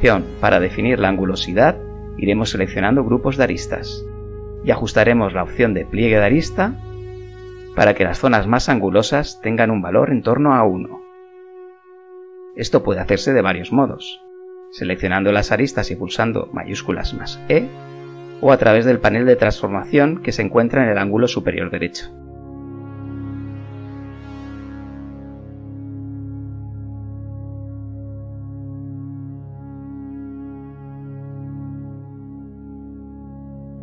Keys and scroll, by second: 1.0 ctrl+e, 1.4 ctrl+e, 8.2 ctrl+e, 8.7 KP_0, 9.6 ctrl+e, 11.9 Tab, 12.7 KP_0, 14.2 Tab, 15.0 ctrl+z, 20.0 KP_1, 20.2 Return, 21.6 typing, 23.2 KP_7, 23.9 b, 24.4 ctrl+z, 25.2 b, 27.0 b, 27.7 z, 28.3 KP_1, 29.8 z, 30.1 b, 31.5 z, 32.0 KP_0.